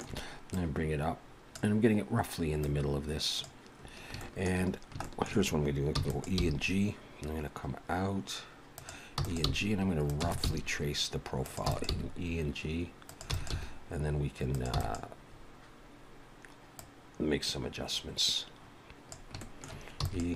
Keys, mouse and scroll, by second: 0.5 click, 2.6 click, 3.8-4.1 scroll up 2, 4.2 shift+middle click, 4.8 scroll down 1, 5.0 shift+middle click, 6.0 e, 6.4 g, 9.2 e, 10.2 e, 10.4 g, 11.7 e, 11.9 g, 13.3 e, 13.5 g, 14.7 e, 16.8 click, 19.4 shift+middle click, 20.0 e.